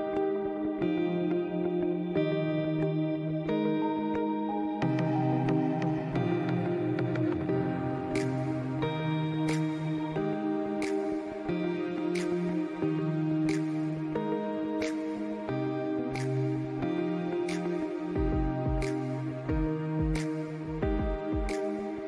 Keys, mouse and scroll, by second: 4.4 alt+scroll down 1, 5.0 click, 6.0-7.7 drag, 8.3 alt+scroll down 1, 8.6-9.1 alt+scroll up 2, 9.7 click, 9.9 scroll up 1, 10.4 alt+scroll up 1, 10.7-13.2 drag, 15.7 click, 16.0 alt+scroll down 1, 16.3 alt+scroll up 1, 16.5 click, 17.9 ctrl+s, 18.3 click, 18.7 ctrl+s, 19.2 ctrl+z, 19.8 click, 20.1 space, 20.2 alt+scroll up 1, 20.4 scroll down 1, 21.3-22.0 drag.